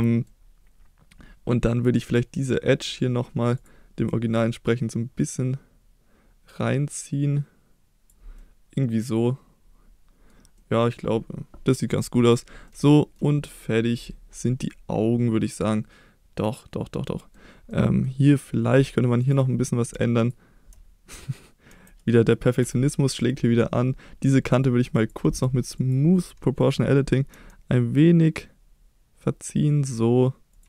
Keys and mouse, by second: 2.1 click, 2.4 click, 3.6 click, 4.1 middle drag, 5.3-8.1 drag, 8.4-10.3 middle drag, 10.7-12.0 middle drag, 12.2 click, 12.7 middle click, 13.5 middle click, 14.6-17.4 middle drag, 17.7-18.1 middle drag, 19.3-19.9 drag, 21.7 KP_7, 22.6 KP_1, 24.6 click, 25.1-26.2 drag, 27.3 g, 30.5 click.